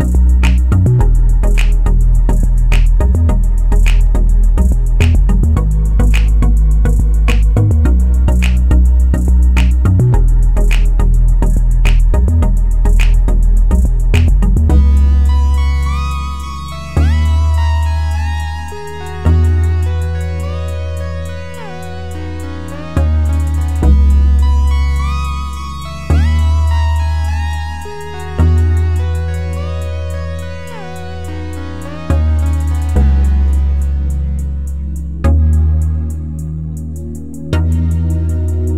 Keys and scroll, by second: 14.9 End, 16.6 End, 26.9 ctrl+z.